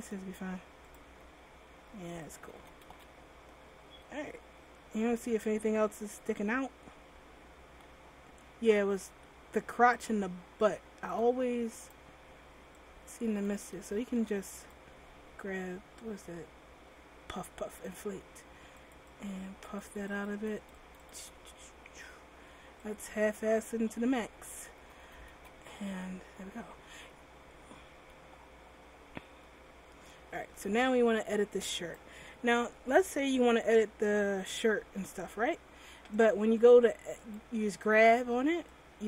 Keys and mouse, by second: 1.2 r, 2.6 a, 2.7 a, 3.1 alt+r, 11.3-14.8 drag, 12.0-13.7 middle drag, 14.0 ctrl+z, 19.0-20.9 drag, 23.1-24.7 drag, 23.5 r, 25.0 a, 25.2 a, 25.5 alt+r, 31.9-36.3 drag.